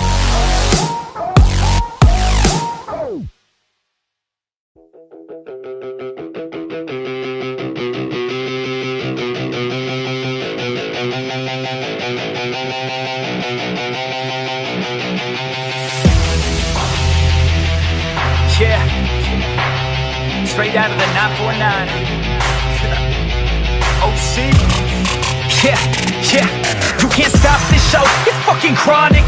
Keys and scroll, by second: 2.9 ctrl+i, 4.5 ctrl+i, 28.4 ctrl+t.